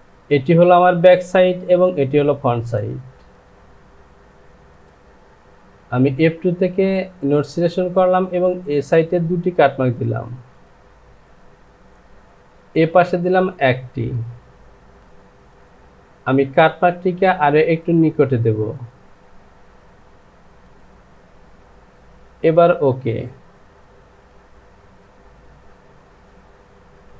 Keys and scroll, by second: 4.4 Home, 15.0 Delete, 24.2 j.